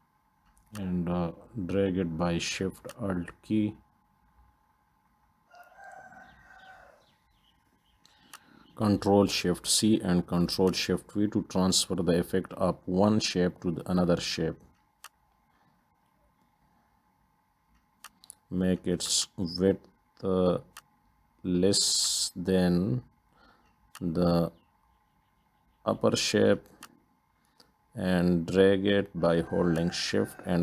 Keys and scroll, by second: 9.8 ctrl+shift+c, 11.5 ctrl+shift+v, 22.9 ctrl+d.